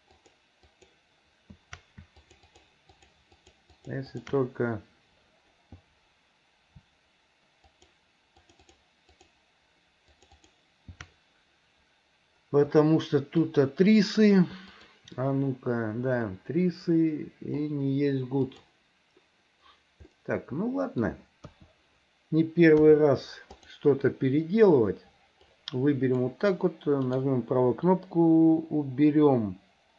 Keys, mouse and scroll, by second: 0.2 ctrl+shift+click, 0.7 ctrl+shift+click, 2.2 ctrl+click, 3.0 ctrl+click, 3.4 ctrl+click, 3.8 ctrl+click, 4.2 ctrl+click, 7.7 alt+shift+click, 8.4 alt+shift+click, 9.2 alt+shift+click, 10.2 alt+shift+click, 10.5 alt+shift+click, 12.9 middle click, 14.7 click, 16.4-17.6 middle drag, 18.4-19.6 drag, 20.2 middle click, 21.5 KP_1, 22.8 KP_3, 23.6 click, 25.7 click, 27.1-29.9 right drag.